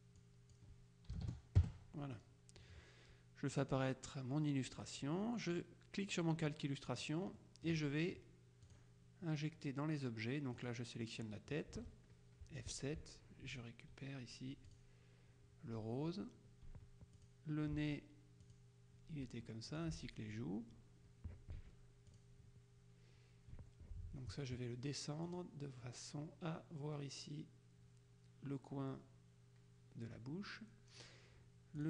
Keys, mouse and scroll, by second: 1.2 KP_5, 1.7 KP_Enter, 3.6 click, 4.8 click, 7.0 click, 8.8 click, 10.6 click, 13.1 F7, 14.8 click, 16.8 F1, 17.2 click, 17.8 F7, 18.5 click, 19.3 F1, 19.8 click, 21.6 F7, 22.2 click, 23.6 F1, 25.3 click.